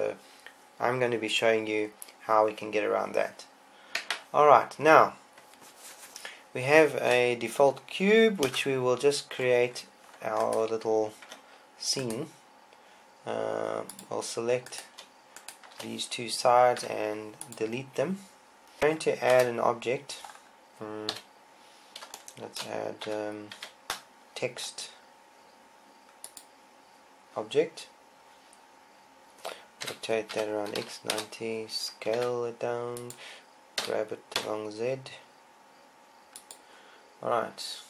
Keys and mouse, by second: 8.5 KP_0, 11.3 Tab, 15.0-17.6 drag, 17.6 Delete, 18.8 z, 19.5 KP_0, 21.2 KP_1, 23.1 z, 23.6 z, 23.8 a, 26.5 shift+a, 29.9 r, 32.2 s, 33.2-35.1 drag, 33.9 g.